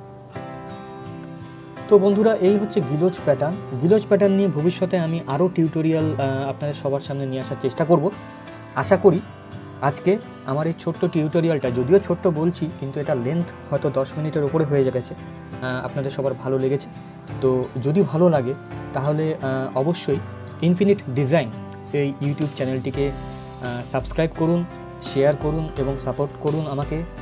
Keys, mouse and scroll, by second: 3.0 scroll up 1, 6.8 click, 8.6-9.0 scroll down 1, 9.8 scroll up 1, 18.9-19.8 scroll down 1.